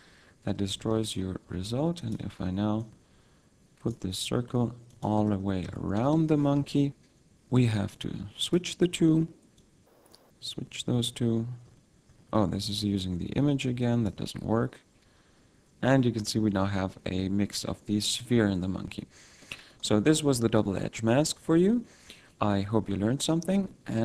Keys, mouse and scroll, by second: 0.8 z, 1.4 s, 2.1 click, 2.8 click, 4.2 s, 5.0 click, 5.2 Tab, 5.7 Tab, 6.0 z, 6.7 F12, 7.9 click, 9.6 click, 11.3 click, 12.8 click, 15.5-15.9 scroll down 2, 15.9 middle click, 19.0-20.7 scroll down 3, 19.4 middle click.